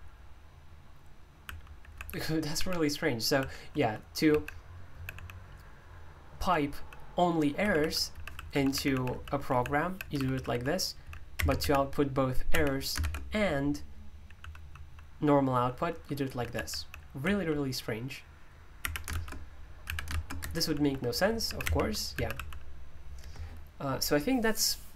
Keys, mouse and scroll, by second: 1.2-5.1 typing, 6.4-13.0 typing, 14.4-17.7 typing, 18.8-22.8 typing, 20.4 Escape.